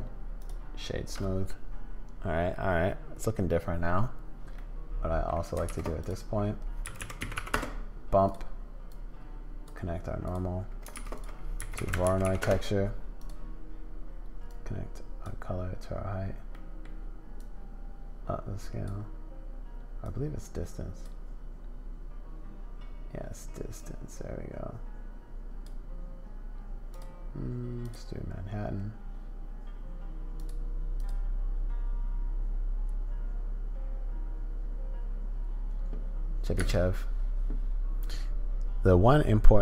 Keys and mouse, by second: 4.6 click, 5.6 shift+a, 8.9 click, 10.2 click, 10.9 shift+a, 14.5 middle click, 16.5 middle click, 17.4-18.9 middle drag, 20.0-21.1 middle drag, 23.8-25.7 middle drag, 26.9-27.9 middle drag, 30.4 middle click, 36.6 space, 38.0-39.6 drag.